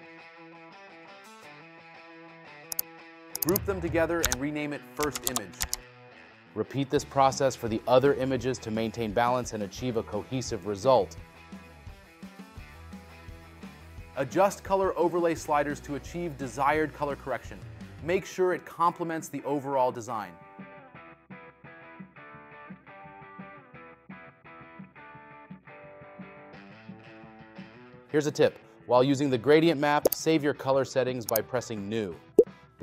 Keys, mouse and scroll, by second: 6.1 space, 21.8 space.